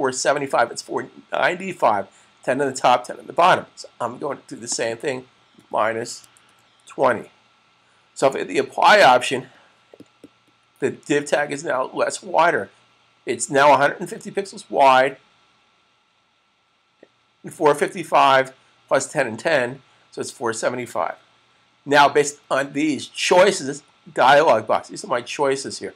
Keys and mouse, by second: 4.5-8.1 click, 5.3-6.6 typing, 7.7-8.6 typing, 8.3 click.